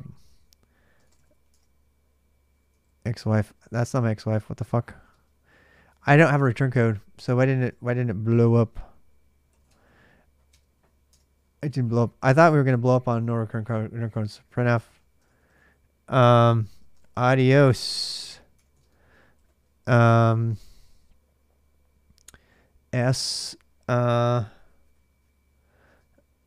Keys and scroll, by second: 0.6-1.5 typing, 2.6 ctrl+a, 2.8 ctrl+a, 4.5-9.9 typing, 10.9 Return, 11.5-12.4 typing, 13.6-20.1 typing, 18.1 Return, 25.7 space.